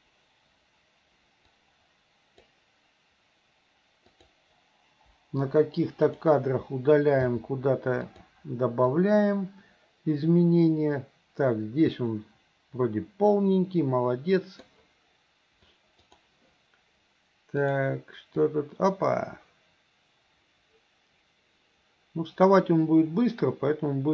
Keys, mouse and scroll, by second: 1.6 click, 4.1 click, 5.1 Delete, 6.1 click, 7.2 g, 9.0-14.7 drag, 17.7 click, 18.5-24.1 drag.